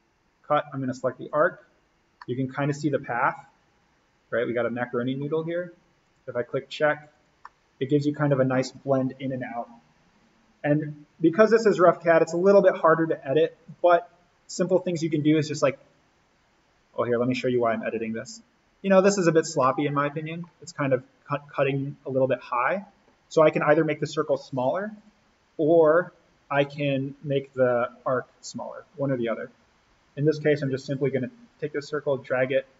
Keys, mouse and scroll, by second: 2.0 scroll down 1, 2.1-6.0 middle drag, 6.0 click, 7.5-10.7 middle drag, 12.1 click, 17.8 click, 18.3-18.8 scroll down 1, 19.6-22.3 middle drag, 22.3-22.7 scroll up 1, 24.9 click, 29.2-32.7 drag.